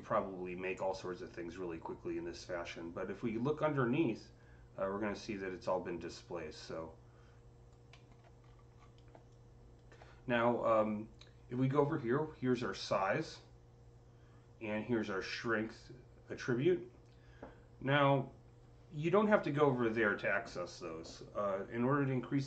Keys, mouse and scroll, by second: 7.8 alt+middle click, 8.3 scroll up 5, 8.6 scroll, 8.7-9.1 scroll down 6, 9.2-12.1 drag.